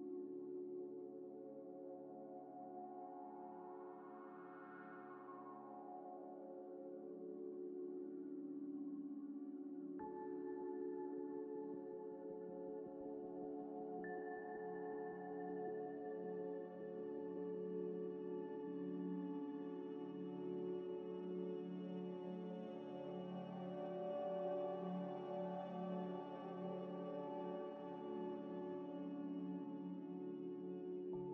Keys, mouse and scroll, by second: 0.0 middle click, 1.8 e, 3.1-4.8 typing, 6.0 s, 6.8 z, 7.1 ئ, 7.5 scroll, 7.6-8.0 scroll up 1, 8.5 س, 9.1 ئ, 9.8 middle click, 10.8 middle click, 10.8 scroll down 1, 11.2 2, 11.7 alt+click, 12.2 click, 12.2 ctrl+y, 12.7 ctrl+middle click, 14.3 Tab, 14.7 Tab, 15.3 alt+click, 15.8 ctrl+v, 16.0 ctrl+z, 16.6 ctrl+z, 16.7 shift+click, 17.0 shift+click, 17.4 ctrl+z, 17.5 ctrl+y, 18.3 ctrl+y, 18.5 ctrl+ئ, 19.1 alt+click, 20.5 Tab, 20.9 middle click, 21.1 right click, 21.8 middle click, 22.6 s, 23.4 g, 23.5 x, 24.3 ء, 25.3 Tab, 25.5 Tab, 25.8 scroll down 1, 26.1 ئ, 26.5 scroll down 1, 27.0 ئ, 27.3 scroll down 1, 27.7 ئ, 27.9 Tab, 28.4 ذ, 28.7 scroll up 1, 30.0 ctrl+s, 31.2 Return.